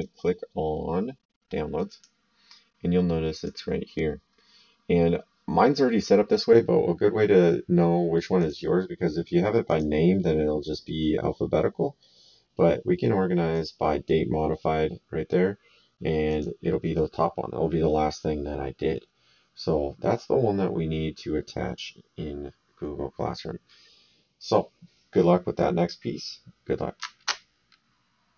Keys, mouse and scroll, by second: 1.9 click, 3.3 click, 8.3 click, 9.6 click, 13.5 click, 16.2 click.